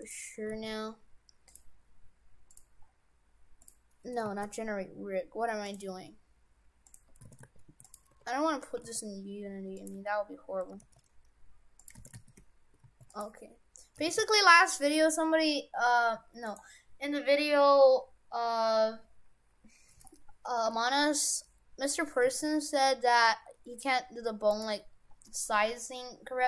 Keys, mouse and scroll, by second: 0.5 g, 2.5 click, 2.9 scroll down 3, 3.6 click, 4.3 ctrl+z, 5.7 click, 6.1 scroll down 3, 6.8 click, 7.3 shift+f, 8.1 Tab, 8.5 Tab, 8.7 g, 9.9 Tab, 10.7 g, 12.0 shift+f, 13.9 g, 22.1 g.